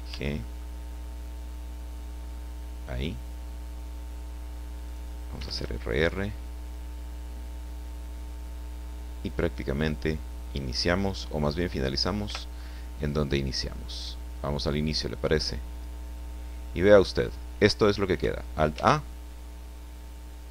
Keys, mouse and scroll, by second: 0.1 g, 0.4 click, 4.8 click, 5.3 r, 9.2 click, 12.2 i, 13.0 click, 15.7 click, 18.7 alt+a.